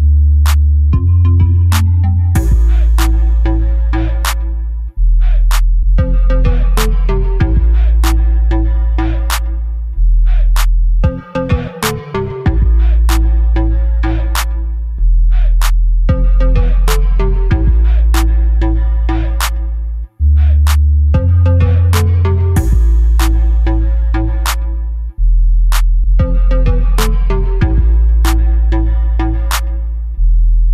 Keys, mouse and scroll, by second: 1.8 KP_0, 13.3 click, 16.1 right click, 27.8 click, 30.2 click.